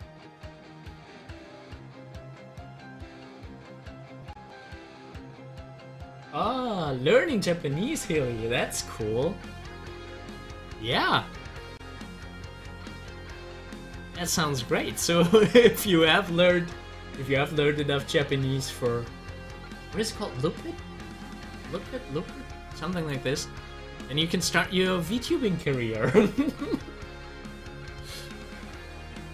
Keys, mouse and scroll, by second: 4.4 click, 9.8 click, 13.6 click, 15.3 middle click, 15.4-18.6 drag, 23.0-27.7 drag, 28.6-29.3 drag.